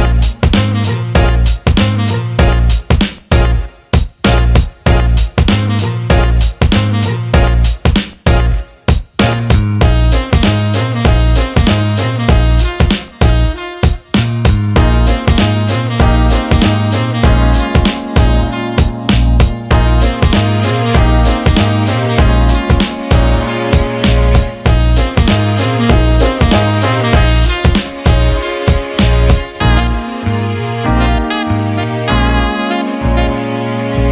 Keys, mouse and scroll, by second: 0.6 alt+middle click, 2.1 click, 11.4 click, 12.9-16.1 shift+drag, 17.2 click, 17.9-18.4 alt+middle drag, 18.9 shift+a, 24.0-24.4 alt+middle drag, 26.5 click, 27.7 click, 28.9 alt+middle click, 30.5 alt+middle click, 31.4 click, 33.4 click.